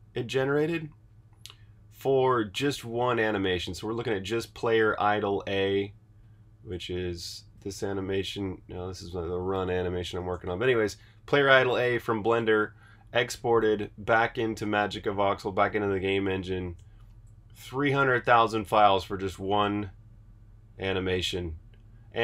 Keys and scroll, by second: 5.3 super+Tab, 7.6 space, 9.4 space, 12.5 super+Tab.